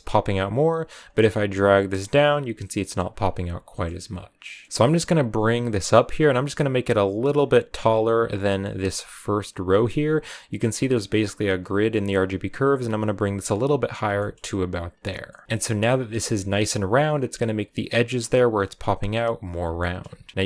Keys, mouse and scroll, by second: 1.9-4.0 drag, 4.0-6.2 middle drag, 6.2-13.7 drag, 13.7-14.0 scroll down 3, 14.0-15.4 shift+middle drag, 15.4-16.9 scroll down 2, 19.6 shift+middle click, 20.0-20.3 scroll up 1.